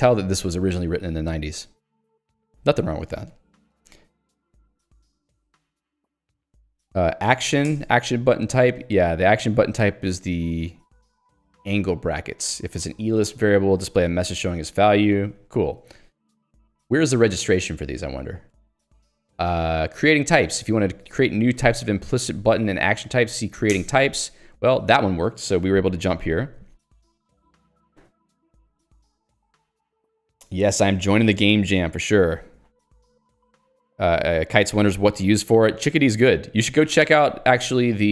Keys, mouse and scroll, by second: 3.9 ctrl+k, 8.2 Return, 12.2 click, 13.5 click, 13.8 j, 16.1 q, 17.4 k, 18.9 j, 20.9 h, 22.0 l, 22.5 h, 23.8 alt+Return.